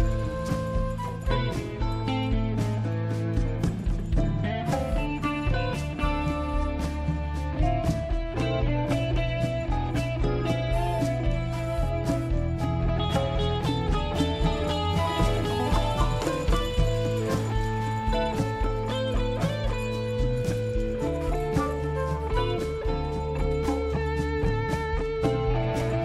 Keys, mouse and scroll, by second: 1.8 click, 3.7 scroll down 1, 4.5-5.2 scroll up 1, 5.7 click, 9.5 click, 10.9 click, 12.3 click, 13.7 click, 16.3 click, 19.2 click, 21.9 click, 24.1 click.